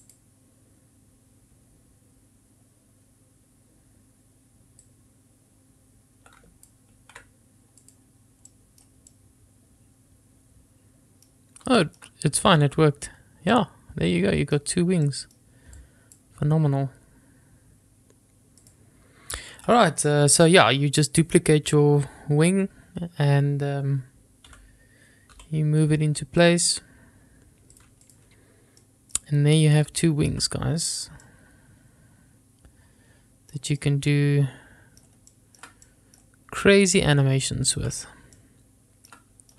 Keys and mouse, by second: 0.3-1.0 drag, 5.1-7.1 drag, 7.3 ctrl+z, 8.1 click, 9.0 middle drag, 9.4-11.9 middle drag, 12.0-12.6 shift+middle drag, 13.8-15.6 middle drag, 16.0-16.5 drag, 18.9 click, 24.8 g, 25.9 y, 28.1 click, 29.1 middle click, 30.3 shift+middle click, 31.5 middle click, 34.1-35.3 middle drag, 35.6 shift+middle click, 38.6 shift+middle click.